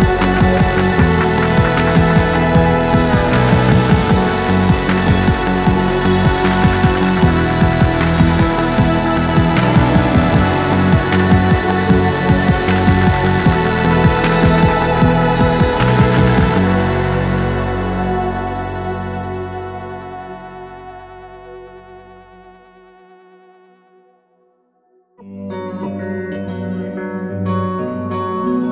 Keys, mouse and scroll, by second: 0.3 alt+middle click, 0.9 scroll up 1, 1.1 scroll down 2, 1.5 alt+middle click, 1.8-2.3 scroll down 3, 2.5 alt+click, 3.1 scroll down 1, 3.4 alt+middle click, 3.6 alt+click, 5.2 alt+click, 5.7 alt+middle click, 5.7 scroll up 1, 6.1 click, 7.0 ctrl+c, 9.6 right click, 10.8 click, 13.5 click, 14.4 click, 15.3 click, 16.0 click, 18.1 click, 18.2 double click, 18.9-20.2 typing, 21.0 click, 21.7 scroll down 2, 22.2 click, 22.7 click, 25.5 click, 26.2 scroll down 1, 27.2 scroll down 1, 27.7-28.3 scroll up 2.